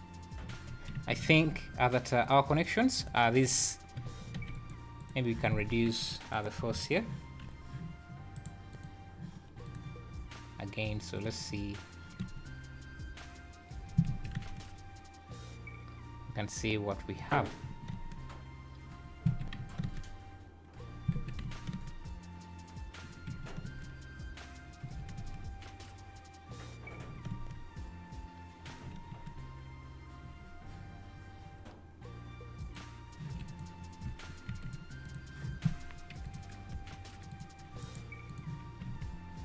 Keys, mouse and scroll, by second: 0.4 z, 1.3 alt+a, 2.3 click, 3.0 click, 3.6 scroll down 2, 4.3 shift+g, 6.0 click, 6.3 click, 8.3 right click, 9.6 click, 11.2 click, 11.5 click, 12.2 space, 14.1 Escape, 14.3 space, 17.2 Escape, 17.6 `, 17.9 space, 19.3 Escape, 19.5 `, 19.8 space, 21.1 Escape, 21.4 `, 21.7 space, 23.2 Escape, 23.6 space, 24.8 Escape, 25.1 space, 27.0 Escape, 27.3 space, 28.6 Escape, 29.1 space, 30.3 Escape, 32.8 click, 33.5 click, 34.5 shift+g, 36.3 click, 37.8 right click, 38.9 alt+a.